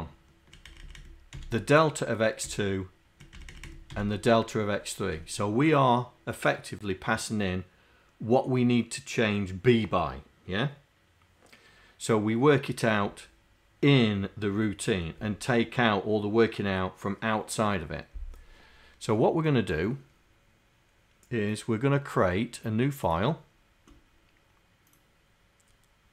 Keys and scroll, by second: 0.8 Down, 1.4 d, 2.4 Down, 3.4 Down, 3.7 Down, 4.0 d.